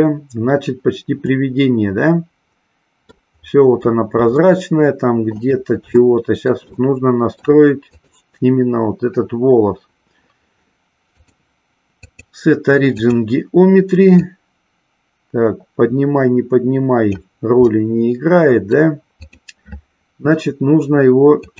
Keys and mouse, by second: 1.4-3.3 middle drag, 4.4-5.5 shift+middle drag, 6.0 shift+middle click, 6.8 middle click, 7.9 click, 11.0-13.2 drag, 14.2-17.2 drag, 17.7-18.8 middle drag, 19.3 click.